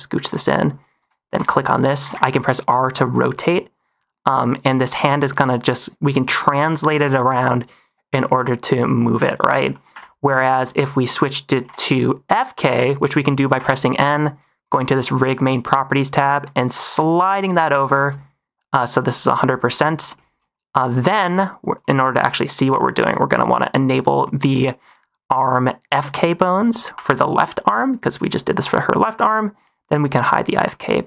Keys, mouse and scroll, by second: 0.4 middle click, 0.9 click, 1.6 middle click, 1.9 r, 2.1 r, 4.5 click, 4.8 g, 9.2 right click, 9.6 middle click, 9.8 n, 10.4 shift+middle drag, 11.5 n, 13.5 n, 14.6 click, 15.0 click, 16.3-17.2 drag, 17.7 shift+middle drag, 19.6 middle drag, 20.0 shift+middle drag, 22.0 middle drag, 26.5 click, 27.3 click, 30.2 click, 30.6-30.9 middle drag.